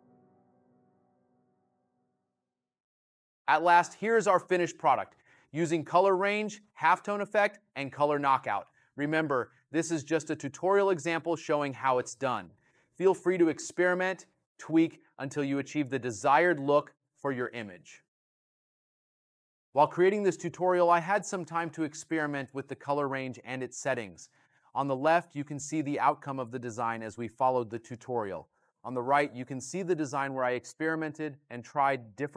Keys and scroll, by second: 5.3 space, 6.6 space, 9.3 space, 11.5 space.